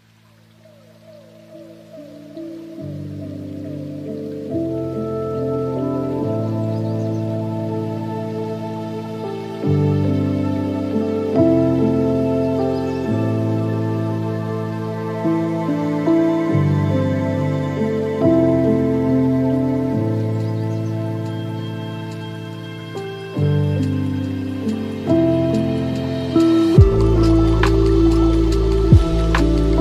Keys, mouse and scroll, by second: 1.8 click, 2.9 click, 3.5 scroll up 6, 4.4 scroll down 4, 5.5-6.7 drag, 6.7 KP_0, 9.4-11.5 drag, 11.5 ctrl+z, 11.7 scroll down 2, 11.9 scroll up 1, 11.9-13.0 scroll down 1, 13.0-16.1 drag, 16.8-17.5 scroll down 2, 17.5 space, 18.7-20.9 scroll up 2, 20.9 space, 22.0-23.1 drag, 23.1-23.6 scroll down 6, 23.6-24.4 middle drag, 24.4-25.0 scroll down 3, 25.0 shift+a, 28.7 g.